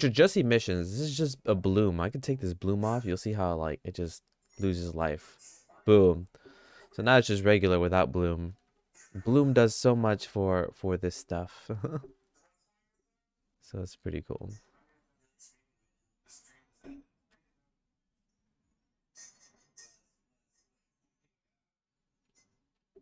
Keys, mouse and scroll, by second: 5.1 click, 8.6 shift+`.